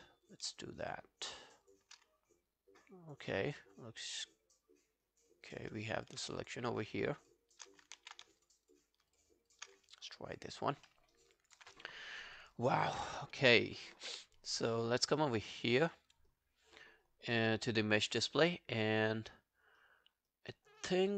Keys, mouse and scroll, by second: 0.8 shift+click, 0.9 shift+click, 2.0 shift+click, 2.1 scroll down 1, 2.5 alt+click, 3.4 alt+click, 5.5 alt+click, 6.0 alt+click, 6.4 shift+click, 7.1 shift+click, 8.0 shift+click, 8.4 shift+click, 8.7 shift+click, 9.8 alt+scroll down 1, 10.0 alt+click, 10.9 alt+middle click, 11.2 alt+right click, 11.4 alt+click, 13.3 alt+click, 16.1 double click.